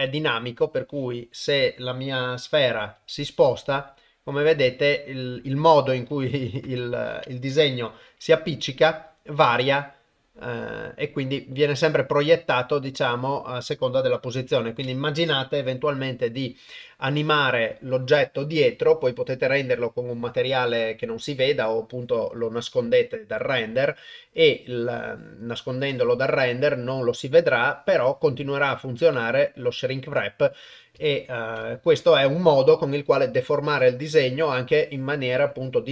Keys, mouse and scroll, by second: 0.3 shift+middle click, 0.7-1.7 middle drag, 2.0 middle click, 3.0 g, 5.7 middle click, 6.6 KP_0, 8.1 g, 12.2-13.8 middle drag, 14.4 KP_0, 29.1-30.4 middle drag, 31.1 ctrl+middle click, 31.6 shift+middle click, 32.1 middle click, 33.5 middle click.